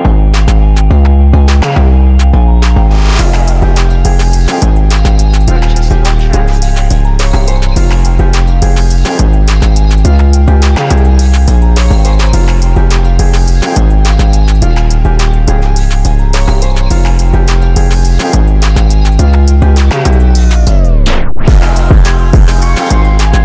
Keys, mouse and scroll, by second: 0.0 click, 1.1 ctrl+z, 1.6 click, 2.5 ctrl+z, 3.2 alt+scroll up 1, 4.0 scroll down 1, 4.7 click, 7.2 right click, 7.3 click, 8.1-9.8 drag, 11.1 click, 15.0 click, 15.5 ], 15.7-19.2 drag, 20.1 alt+scroll up 1, 20.6-23.4 drag.